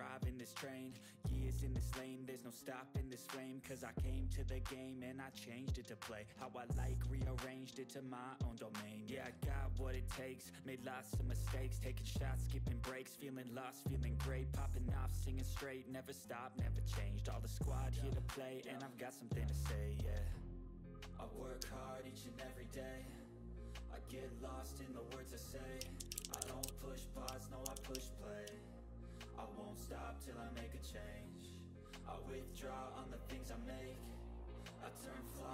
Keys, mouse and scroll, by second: 5.0-7.2 drag, 9.5 click, 12.2-18.1 drag, 12.2 typing, 19.2 click, 21.2 4, 21.6 click, 24.4 click, 25.6-28.1 typing, 28.4 ctrl+scroll up 1, 28.7 click, 29.6-33.7 drag, 33.7 typing, 35.2-35.5 drag.